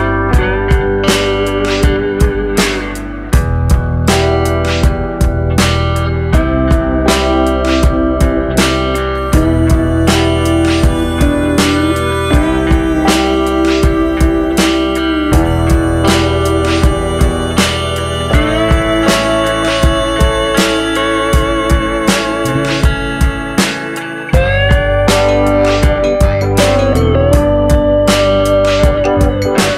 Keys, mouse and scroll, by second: 1.3 middle click, 2.2 ctrl+b, 14.5 click, 14.7 middle click, 15.4 scroll up 1, 15.9 click, 16.5 alt+click, 17.1 alt+shift+click, 17.7 alt+click, 19.1 alt+shift+click, 19.9 ctrl+b, 23.0 middle click, 23.6 middle click, 24.9 ctrl+b, 27.6 Tab, 27.9 middle click.